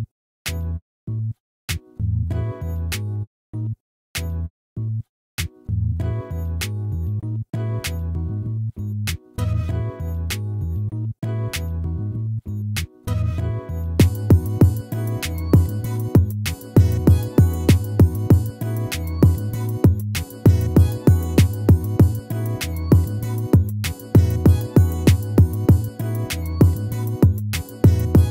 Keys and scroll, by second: 3.6 ctrl+-.